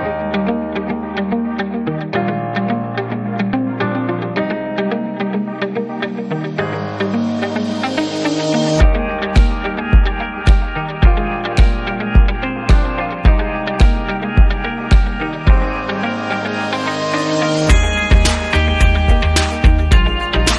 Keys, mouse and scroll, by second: 3.1 click, 3.2 click, 4.1 click, 4.8 click, 5.5 click, 8.6 click, 11.0 click, 12.6 click, 13.0 click, 14.5 click, 15.5 click, 16.4 click, 18.1 click, 19.5 click.